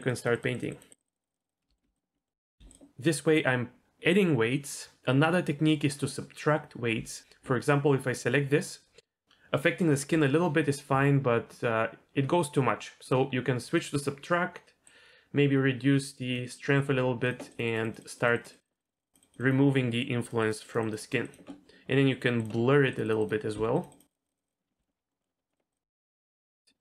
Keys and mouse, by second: 0.1 click, 0.4 click, 0.7 click, 1.0 click, 1.2 click, 1.7 shift+middle click, 2.1 middle click, 13.1 click, 14.9-16.4 drag, 16.9 f, 17.5 click, 18.2 click, 18.4 click, 18.6 click, 19.0 click, 19.2 click, 19.3 click, 19.5 click, 19.7 middle click, 20.3 click, 21.1 click, 21.5 middle click, 22.4 click, 23.0 click, 23.3 click, 23.5 f, 24.1 click, 24.5 click, 24.7 middle click, 25.2 middle click, 25.7 click, 26.0 click, 26.1 middle click, 26.7 middle click.